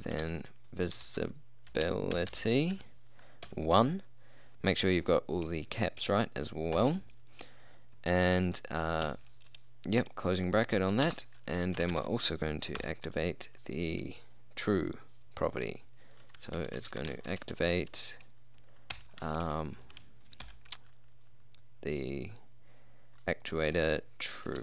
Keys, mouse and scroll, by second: 0.2-3.5 typing, 6.8 shift+', 9.1 shift+0, 11.1 Return, 11.8-12.8 typing, 16.5-17.5 typing, 19.0 shift+9, 20.5 shift+', 23.8-24.6 typing.